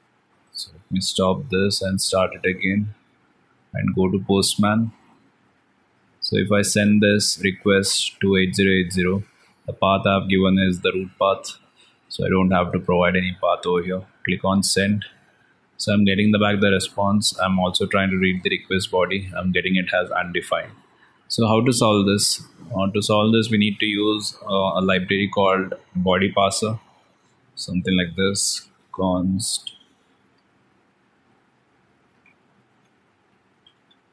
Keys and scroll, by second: 1.0 ctrl+c, 2.8 alt+Tab, 8.9 alt+Tab, 16.2 alt+Tab.